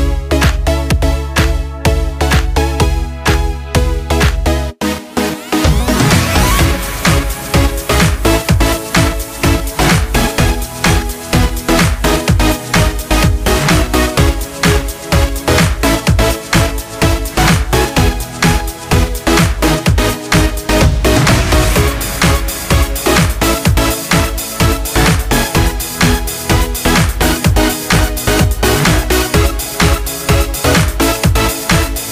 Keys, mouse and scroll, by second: 0.4 right click, 1.7 click, 5.9-8.7 drag, 8.8 click, 13.4-28.8 drag.